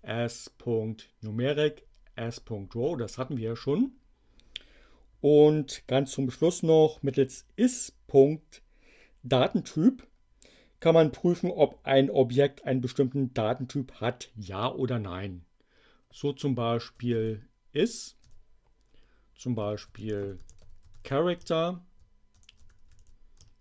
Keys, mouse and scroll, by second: 16.7-23.6 typing.